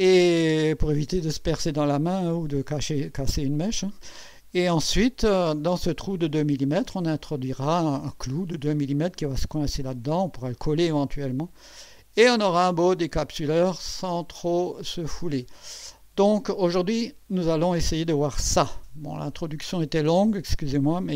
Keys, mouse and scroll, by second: 6.3-6.9 drag, 10.9-12.7 drag, 12.9 click, 13.5-17.8 drag.